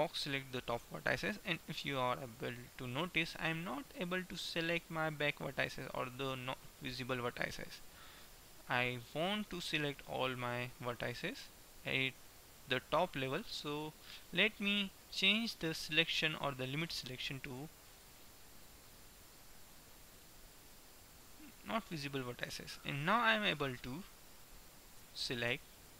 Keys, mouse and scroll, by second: 1.8-3.3 middle drag, 6.3-9.7 middle drag, 10.2-12.7 middle drag, 12.7 KP_1, 18.0-19.8 drag, 22.0-24.2 middle drag, 24.2 KP_1, 25.2 a, 25.7 b.